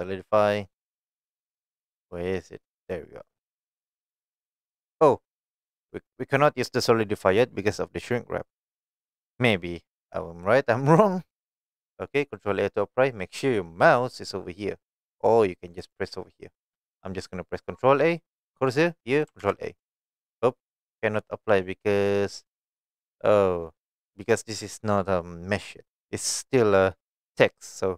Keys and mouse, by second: 3.2 middle drag, 4.1 shift+middle click, 6.4 click, 8.6 click, 15.8-16.5 drag, 19.4 ctrl+a, 24.4 click.